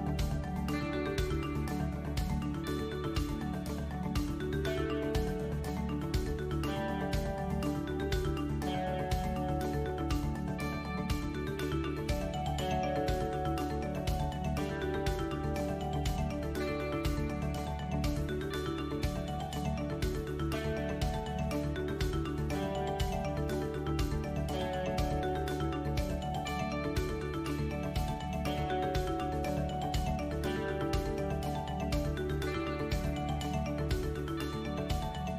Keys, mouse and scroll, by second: 0.2 click, 2.3 middle click, 3.8 KP_7, 4.9 a, 5.5 click, 8.8 shift+middle click, 9.6 middle click, 11.1 click, 11.8 ctrl+r, 14.3 ctrl+r, 16.5 alt+click, 17.4 alt+shift+click, 18.3 click, 20.8 alt+click, 21.5 alt+shift+click, 22.1 ctrl+z, 22.1 shift+click, 22.6 click, 27.9 ctrl+KP_7, 28.7 3, 29.3 click, 29.9 shift+click, 30.5 click, 31.7 shift+click, 32.2 KP_3, 33.3 e.